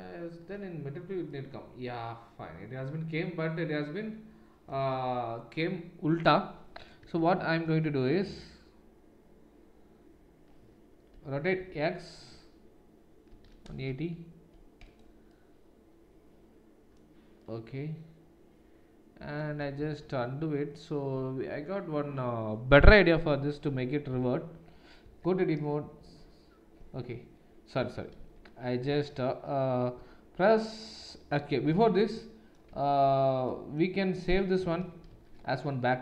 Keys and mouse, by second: 7.0 Tab, 7.6 Tab, 11.1 r, 28.2 ctrl+z, 28.2-36.0 ctrl+middle drag, 28.2 a, 28.8 Tab, 31.7 Tab, 32.7 Tab, 35.1 ctrl+shift+s.